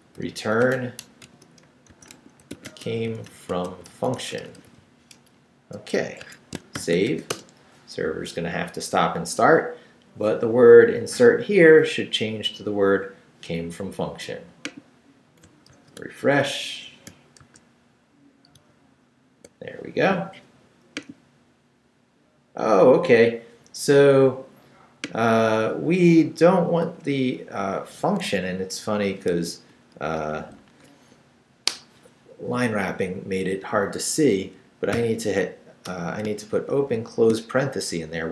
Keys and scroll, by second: 0.0-5.3 typing, 6.2 shift+Escape, 6.7 shift+;, 7.1 shift+w, 7.3 Return, 15.7 super+r, 17.4 super+r, 26.3 Up, 28.2 Escape, 29.2 shift+Escape, 29.3 shift+a, 30.2 shift+Left, 35.0 i, 35.8 BackSpace, 36.6 shift+9, 36.9 shift+0, 38.0 shift+Right.